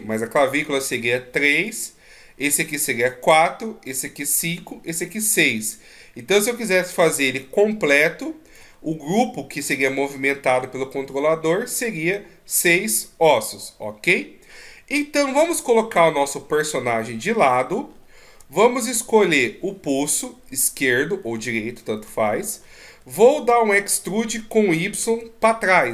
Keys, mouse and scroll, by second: 0.0-1.1 shift+scroll up 2, 1.5 shift+scroll up 1, 1.5 right click, 7.2 d, 7.4 right click, 8.6 d, 15.3 KP_3, 17.8-18.5 shift+scroll up 5, 18.8-19.3 shift+scroll up 3, 19.3 right click, 20.5-21.5 scroll up 1, 21.5 scroll up 1, 22.6 shift+scroll up 3, 23.9 e.